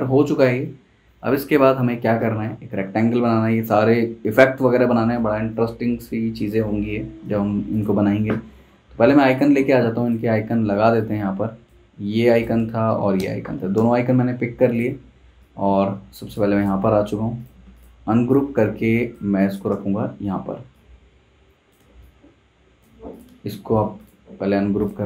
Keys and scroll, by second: 12.9 super+c, 13.2 super+Tab, 13.7 super+v, 19.2 z, 19.7 v.